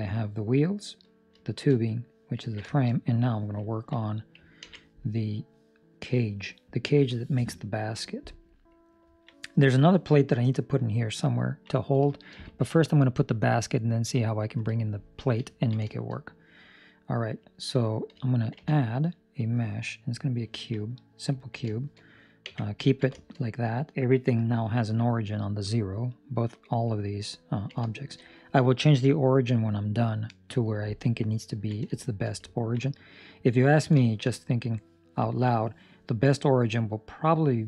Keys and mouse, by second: 1.3 shift+middle click, 1.7 middle click, 2.3 ctrl+middle click, 2.6 shift+middle click, 3.7 ctrl+middle click, 4.6 ctrl+s, 4.8 middle click, 8.4 middle click, 9.1 ctrl+middle click, 11.4 ctrl+middle click, 12.0 shift+middle click, 12.5 ctrl+middle click, 15.4 ctrl+middle click, 15.8 shift+middle click, 16.1 middle click, 20.5 ctrl+middle click, 20.7 middle click, 21.3 ctrl+middle click, 21.6 shift+middle click, 22.4 Tab, 22.9 ctrl+middle click, 23.0 shift+middle click, 23.4 middle click, 26.4 KP_7, 27.4 ctrl+middle click, 27.8 shift+middle click, 31.4 ctrl+middle click, 31.9 shift+middle click, 32.4 ctrl+middle click, 32.9 middle click, 33.6 ctrl+middle click, 34.1 shift+middle click, 34.3 middle click, 35.2 ctrl+middle click.